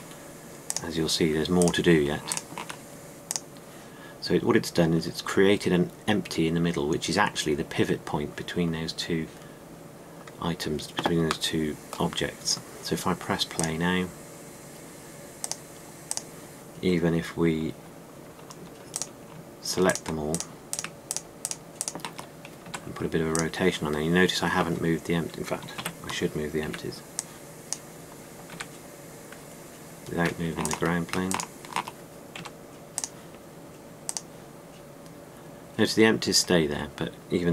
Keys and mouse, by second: 23.5 r, 26.7 ctrl+z, 27.5 b, 29.4 r, 33.2 r.